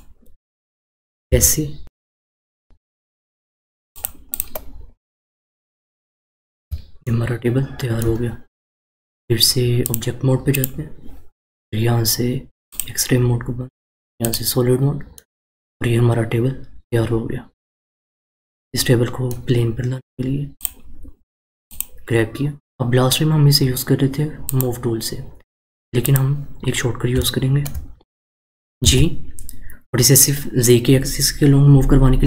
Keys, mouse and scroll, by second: 4.3 click, 5.4-6.1 scroll down 1, 6.1-7.0 scroll down 3, 7.0-9.8 shift+middle drag, 9.8-14.3 drag, 15.1-18.1 middle drag, 20.5 click, 21.6 click, 24.4-27.2 drag, 27.2-27.9 shift+middle drag, 27.9-28.8 scroll down 1, 28.8 g.